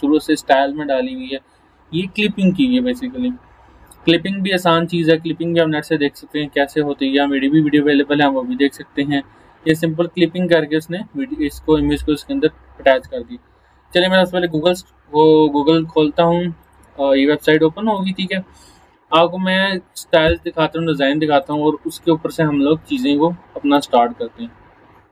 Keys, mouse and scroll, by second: 12.1 click, 12.3 click, 21.4 click, 23.8 click.